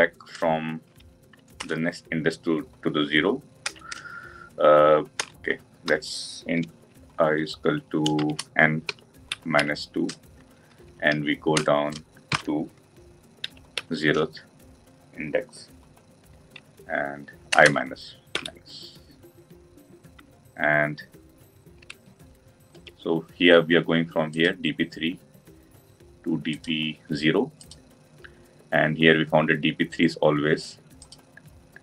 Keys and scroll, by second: 1.7 Return.